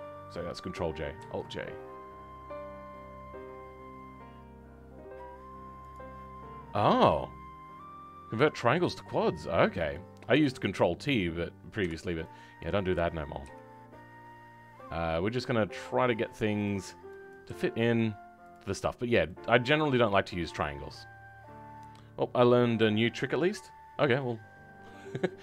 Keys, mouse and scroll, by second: 19.4 middle click, 20.2 scroll up 1, 23.9 middle click.